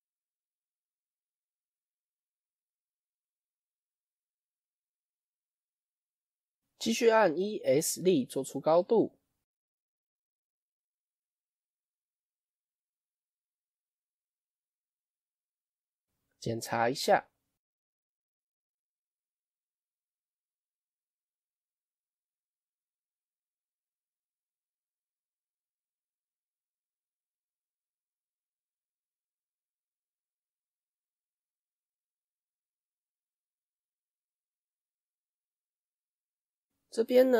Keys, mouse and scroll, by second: 4.9-5.2 scroll down 5, 5.2-6.8 shift+middle drag, 6.8-7.9 scroll down 2, 15.3-18.3 middle drag, 18.3-18.7 scroll up 2, 18.7 middle click, 19.2-19.7 scroll up 2, 19.7-22.7 middle drag, 22.7 click, 23.1-24.3 middle drag, 24.3 scroll down 3, 24.9 Tab, 25.1-28.1 middle drag, 28.2-29.4 middle drag, 29.4 KP_1, 30.1-30.7 scroll up 1, 30.7-34.7 shift+middle drag.